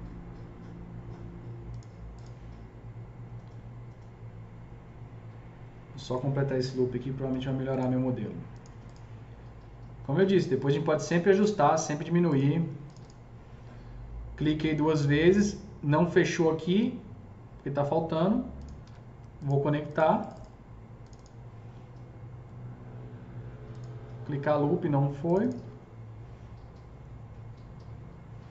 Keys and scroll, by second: 6.7 alt+c, 7.3 s, 18.9 alt+c.